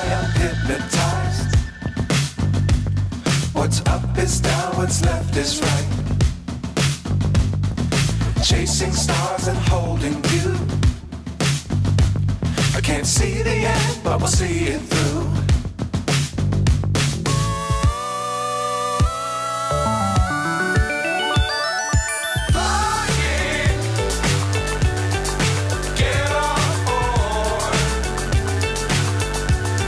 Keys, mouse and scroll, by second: 0.6 g, 4.7-6.7 drag, 7.4-8.5 drag, 9.3-10.4 drag, 10.7-12.1 drag, 13.4-14.6 drag, 15.1 click, 15.8 g, 17.4 g, 18.9 g, 19.9 g, 22.0 click, 23.2 g, 25.2 r.